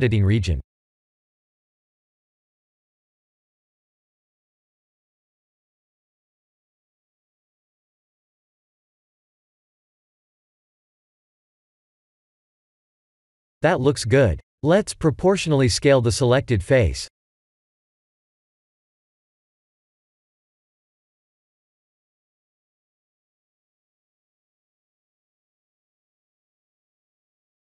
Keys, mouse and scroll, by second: 0.7 ctrl+z, 1.2 r, 12.3 middle click, 15.6 middle click, 17.8 s, 22.6 middle click, 25.0 middle click, 25.2 Tab, 26.0 middle click, 26.8 middle click.